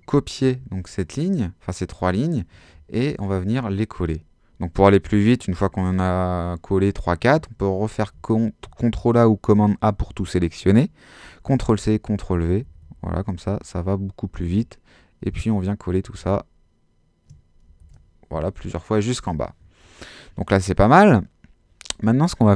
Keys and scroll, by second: 0.6 super+c, 2.7 super+v, 8.0 super+a, 11.5 super+c, 11.9 super+v, 17.8 super+v.